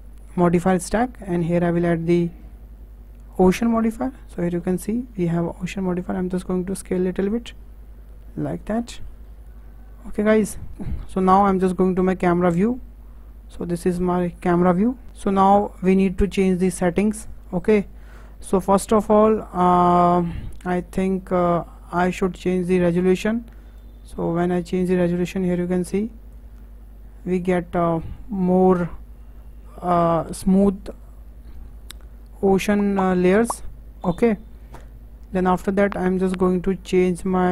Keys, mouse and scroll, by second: 1.2-3.9 drag, 3.9-4.7 scroll down 12, 4.7 shift+middle click, 5.1-5.6 scroll up 2, 5.6 s, 7.5-8.0 scroll up 8, 8.0 s, 8.8 middle click, 9.2-10.7 scroll up 5, 10.7-11.9 shift+middle drag, 12.5 KP_0, 23.8-26.8 drag.